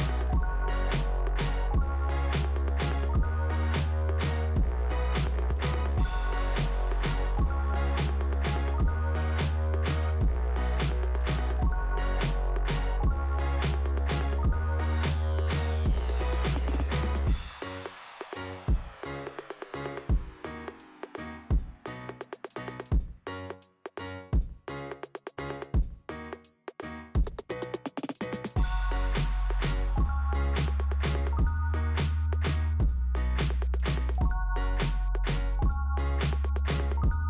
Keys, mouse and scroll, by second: 0.3 click, 5.7-6.8 scroll up 1, 6.8 scroll up 1, 7.2 click, 8.5 click, 12.4 scroll down 2, 15.5 click, 18.6 scroll down 2, 20.2 click, 20.7-21.5 scroll down 2, 21.5 click, 24.6-24.9 scroll up 2, 24.9 click, 26.1 click, 28.2 middle click, 28.9-29.4 scroll up 2, 29.4 click, 30.4 click, 30.8 click, 33.7 click, 36.6 click.